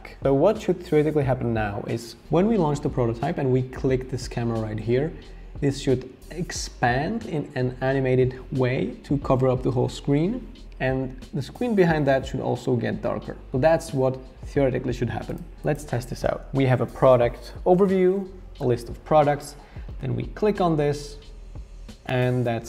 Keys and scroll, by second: 16.3 r.